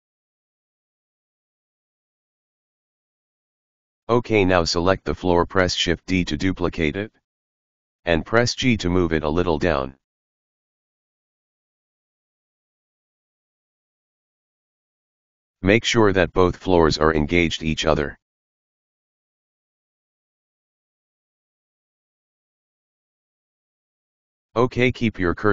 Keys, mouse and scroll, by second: 0.7-1.1 scroll down 3, 1.1 click, 1.7 right click, 3.4 shift+d, 8.1-12.0 middle drag, 12.0 KP_1, 13.4 KP_3, 14.1-14.7 scroll up 6, 16.5 g, 20.0 KP_1, 20.8 scroll down 2, 22.1-24.8 middle drag, 24.8 click, 25.4-25.5 middle drag.